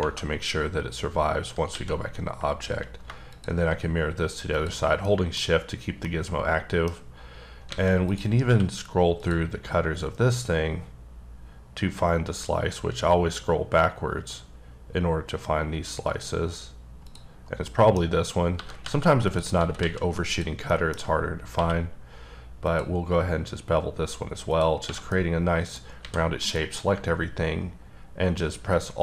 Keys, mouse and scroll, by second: 1.1-1.4 scroll down 1, 1.7 alt+x, 3.3 shift+click, 5.0 middle click, 5.4 scroll up 1, 6.0 middle click, 7.2-7.6 scroll up 2, 7.7 alt+a, 8.0 click, 8.4 q, 9.2 click, 9.7-10.3 scroll down 1, 10.3-10.6 scroll down 1, 10.6-11.6 scroll up 5, 11.6-12.3 scroll down 6, 12.3-13.0 scroll up 2, 13.0-15.1 scroll down 14, 16.0-16.5 scroll up 1, 16.5-17.0 scroll down 1, 17.0 click, 17.3 scroll down 2, 17.7 middle click, 17.9 scroll down 1, 18.0-18.5 scroll up 1, 18.5 g, 18.8 z, 19.3 click, 19.6 s, 19.8 z, 20.3 click, 20.7 middle click, 20.9-21.5 scroll up 4, 21.5 q, 22.6 click, 23.5-24.1 scroll up 7, 24.5 click, 24.8 scroll down 3, 24.8 1, 25.1 middle click, 26.0 a, 26.4 alt+m.